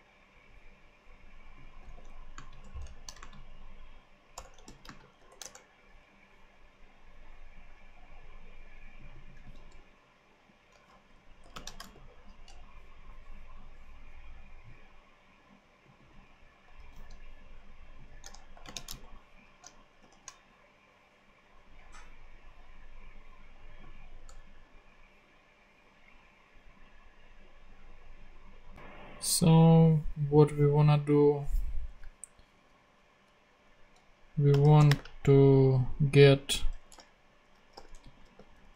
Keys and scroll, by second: 2.3 super+space, 2.6-5.1 typing, 5.4 shift+Return, 9.4 super+c, 11.4 shift+;, 11.5 shift+space, 11.8 shift+super+v, 12.6 super+v, 16.7 super+c, 18.5 shift+;, 18.6 shift+space, 20.0 shift+super+p, 24.2 Return, 34.2-35.2 typing, 36.6-38.7 typing.